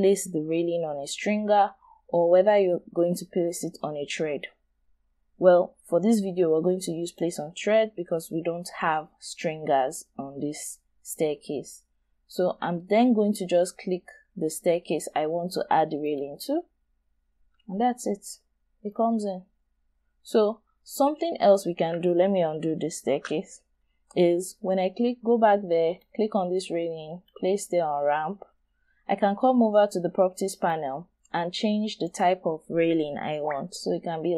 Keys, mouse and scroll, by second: 8.0-8.5 scroll down 1, 8.5-9.6 scroll up 1, 11.1 scroll down 1, 12.1-14.0 scroll down 1, 15.2-16.7 scroll up 1, 17.8 scroll up 1, 17.9 shift+right click, 19.1 shift+scroll up 1, 20.1-20.9 scroll down 1, 20.9-22.3 scroll down 1, 22.6 scroll down 1, 23.0 ctrl+z, 23.7-24.3 scroll up 1.